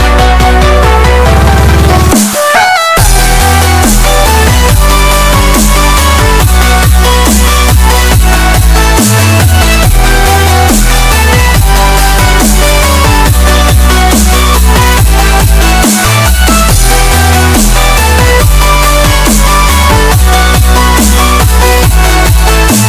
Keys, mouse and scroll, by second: 0.8 s, 2.8 click, 3.5 s, 5.6-10.0 drag, 10.1 click, 12.7 click, 16.0 scroll up 1, 16.5 scroll down 1, 16.6 scroll, 16.6 scroll up 1, 20.8 click.